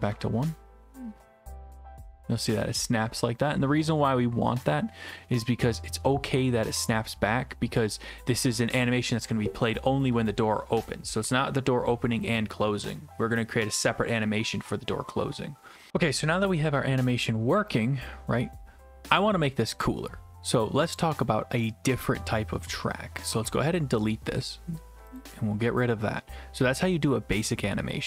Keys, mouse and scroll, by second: 0.0 1, 0.1 Return, 20.9 click, 25.2 click.